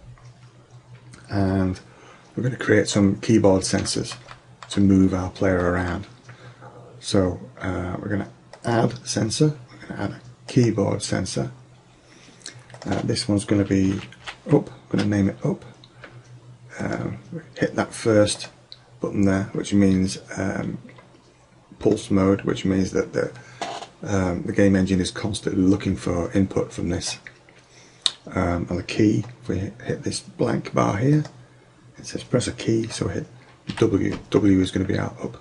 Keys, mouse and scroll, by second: 3.9 middle click, 12.8-14.7 drag, 16.9-20.3 drag, 21.9 click, 31.2 click.